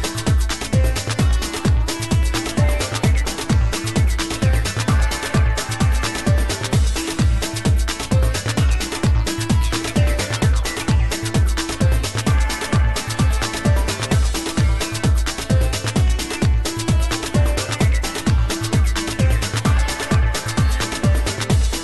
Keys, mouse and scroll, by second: 2.1-5.8 drag, 7.0 middle click, 7.4 middle click, 8.5-10.2 drag, 11.2 click, 13.7-15.5 drag.